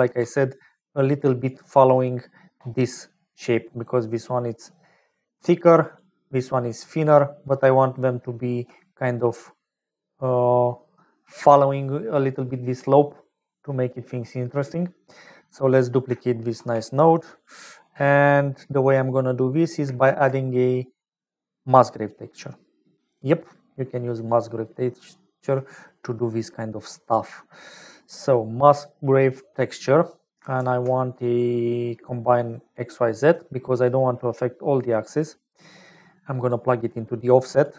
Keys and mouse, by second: 0.1 d, 0.5-1.7 drag, 1.4 d, 1.5-1.9 d, 2.4 d, 2.5 d, 3.3 click, 5.3-8.6 typing, 5.5 click, 6.7-7.9 drag, 7.9 middle click, 9.1 click, 12.4 click, 15.9 click, 16.5 shift+d, 18.2 click, 19.2 click, 20.0 shift+a, 24.3 click, 25.4 g, 27.1 click, 28.6 middle click, 29.4 middle click, 30.5 shift+a, 35.9 click, 37.2 click.